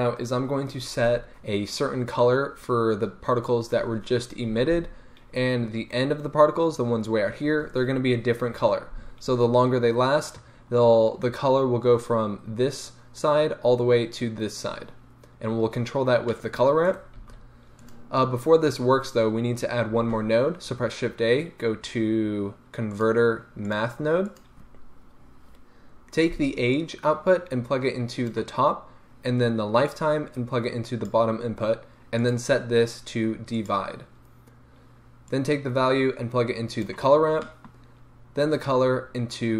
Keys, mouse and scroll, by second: 1.8-2.6 scroll up 1, 10.6-11.8 scroll up 1, 14.9-16.3 scroll down 1, 16.3 middle click, 16.9 right drag, 17.2 g, 17.9 click, 20.0 shift+a, 24.4 click, 26.8-37.4 drag, 37.4-38.6 middle drag, 38.6-39.5 drag.